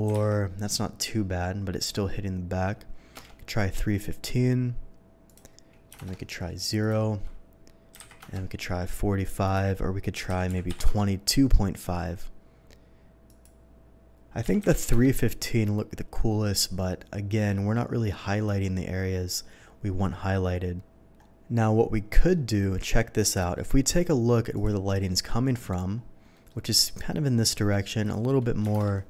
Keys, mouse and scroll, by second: 0.1 KP_1, 0.1 KP_5, 3.2 Return, 5.3 click, 5.7 Return, 5.9 KP_0, 6.1 Return, 6.8 click, 8.0 KP_5, 8.2 KP_4, 8.4 Return, 9.4 click, 10.1 KP_2, 10.3 KP_2, 10.5 KP_Decimal, 10.7 KP_5, 10.9 Return, 13.3 click, 14.5 KP_3, 14.7 KP_1, 14.7 KP_5, 15.1 Return, 22.1 middle click, 23.2 click, 23.6 middle click, 24.5 click, 25.1-25.8 middle drag, 26.3 middle click, 28.0 click, 28.7 KP_0, 28.9 Return.